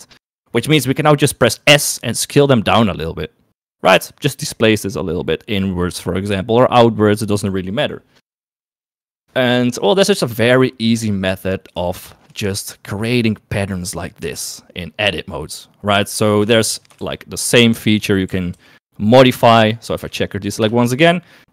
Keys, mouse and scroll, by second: 1.8 s, 12.0 shift+middle click, 16.3 Tab, 16.6 shift+middle click, 17.1 shift+a, 18.4 g, 19.5 Tab, 20.1 F3.